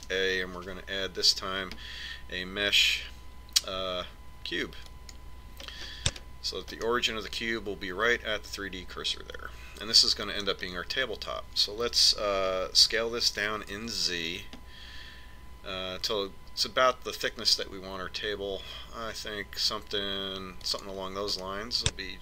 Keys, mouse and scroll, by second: 0.9 shift+a, 6.8-9.8 middle drag, 14.0 s.